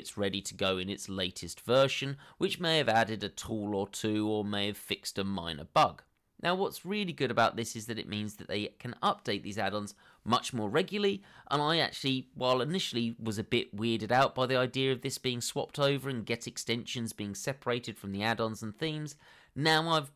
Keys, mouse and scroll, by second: 1.4 double click.